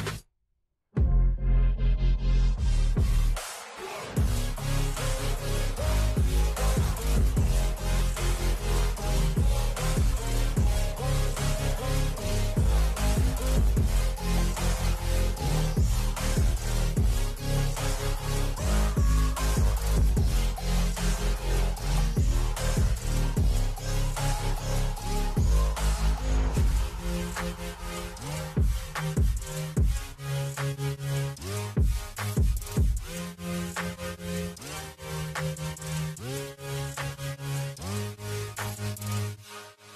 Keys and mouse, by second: 0.7 t, 6.5 click, 8.5 c, 9.9-14.7 typing, 15.9 Tab, 16.3 Tab, 16.8 Tab, 18.1 Tab, 18.8-21.4 typing, 21.8 Tab, 22.1 Tab, 22.5 Tab, 22.8 Tab, 25.1 f, 25.6 r, 26.8-29.6 typing, 33.3 click, 34.7 click, 36.1 click, 38.0 click, 39.5 click.